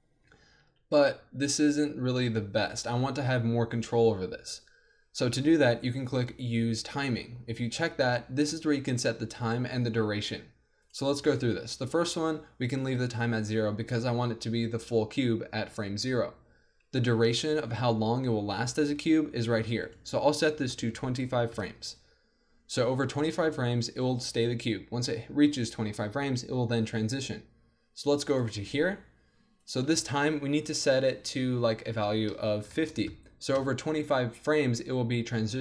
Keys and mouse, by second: 0.7 alt+a, 2.1-12.8 drag, 19.8-21.8 drag, 28.4-35.6 drag.